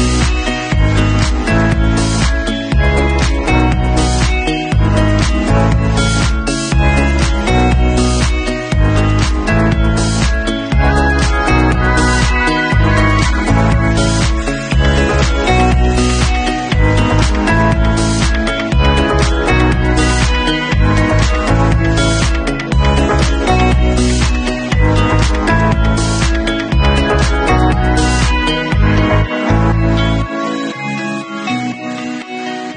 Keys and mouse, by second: 1.5 ctrl+shift+f, 12.0 ctrl+shift+f, 15.8 shift+Tab, 16.7 shift+q, 17.0-17.8 middle drag, 17.5 Tab, 17.8 click, 17.9 middle click, 18.2 click, 18.6 3, 19.0 click, 19.2 l, 19.7 Delete, 20.6 Tab, 21.3 shift+q, 21.9 shift+q, 22.2 shift+middle click, 22.3 shift+click, 22.4 middle drag, 22.7-24.7 drag, 24.7-25.1 middle drag, 25.1-28.7 drag, 28.7-29.7 middle drag, 29.7 click, 29.8-32.7 ctrl+middle drag, 30.1 ctrl+s.